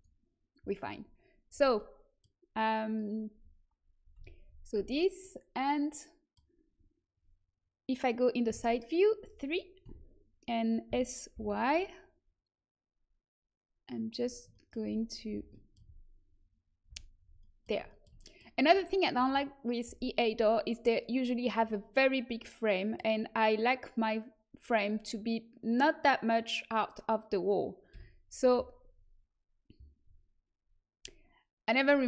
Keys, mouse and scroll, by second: 1.7-4.1 middle drag, 4.1 a, 4.7 z, 8.4 KP_3, 9.8 a, 10.8 s, 14.5 middle click, 15.3 z, 16.8 z, 27.9 KP_7.